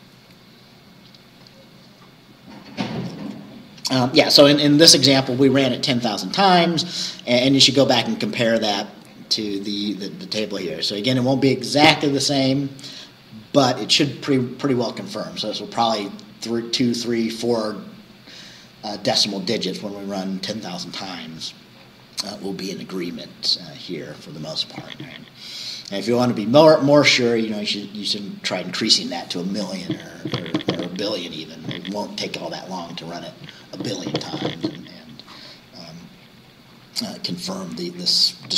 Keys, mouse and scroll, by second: 4.5-4.9 scroll down 2, 7.8-9.8 scroll up 6, 19.5-21.4 scroll down 6, 21.8 scroll down 2, 26.2-26.5 scroll up 2, 36.0-36.8 scroll down 4.